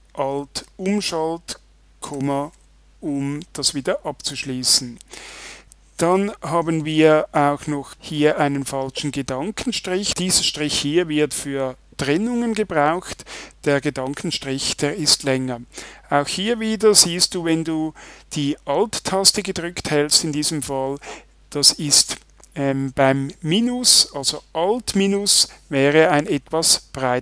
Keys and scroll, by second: 25.2 alt+-.